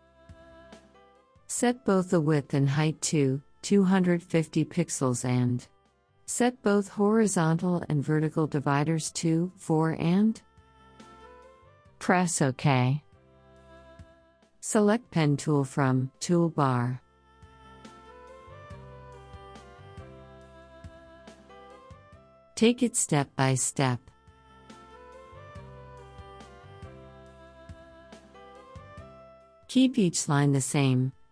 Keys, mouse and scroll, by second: 6.9 click, 10.2 click, 18.2 click, 21.0 ctrl+click, 24.9 click, 26.7 ctrl+click.